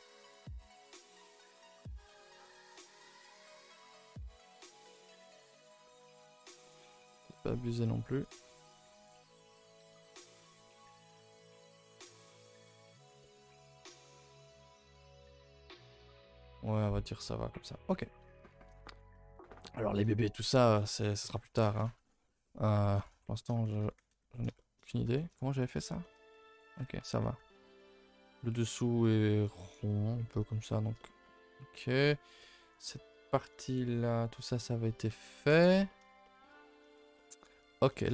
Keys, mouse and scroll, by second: 1.1 g, 2.3 click, 2.7 middle click, 3.4 z, 4.1 s, 5.8-7.8 middle drag, 7.8 click, 8.1 middle click, 8.6 s, 9.4 middle click, 9.9 click, 10.1 middle click, 10.6 s, 11.9 click, 12.2 Tab, 12.3 scroll down 2, 12.6-12.9 middle drag, 12.9 Tab, 13.2 middle click, 13.4 g, 14.1 a, 14.4 Tab, 14.6 a, 14.8 a, 14.8-15.2 scroll down 4, 15.2 ctrl+s, 15.4-15.9 middle drag, 15.9 scroll down 3, 16.1 scroll up 1, 16.2-18.2 middle drag, 18.2 scroll down 1, 18.4 a, 18.5 a, 18.8 ctrl+s, 19.1-20.3 middle drag, 20.3 scroll up 1, 20.5-21.1 shift+middle drag, 21.1 a, 21.3 a, 21.6 ctrl+s, 21.8-23.6 middle drag, 23.6 a, 23.8 a, 24.0 ctrl+s, 24.5 shift+middle drag, 24.8-25.6 scroll up 4, 25.1 shift+middle drag, 25.6 click, 25.7 Tab, 26.0 shift+middle click, 26.6 scroll down 4, 26.7 Tab, 26.9 a, 27.1 a, 27.2 middle drag, 29.5 middle click, 30.4 scroll down 2, 30.6-32.5 shift+middle drag, 35.8-37.6 middle drag, 37.6 scroll down 2, 37.9 middle drag, 38.0 a.